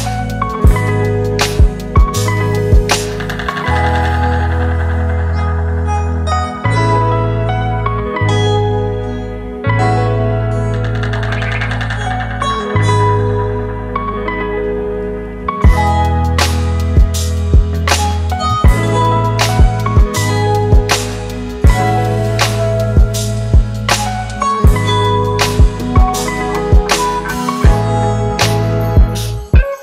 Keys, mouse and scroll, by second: 2.2 double click, 4.0 typing, 4.9 double click, 7.8 ctrl+t, 9.2 ctrl+click, 11.7 ctrl+click, 14.0 ctrl+click, 20.1 Return, 22.1 ctrl+t, 23.3 ctrl+click, 24.5 ctrl+click, 26.4 Return.